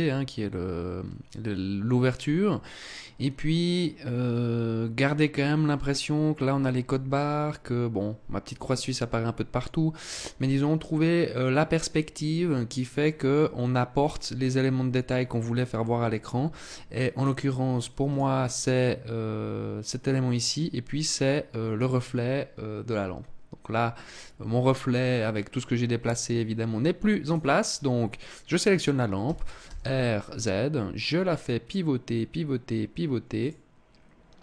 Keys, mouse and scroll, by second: 16.6 click, 26.8 right click, 28.8 r, 33.0 click.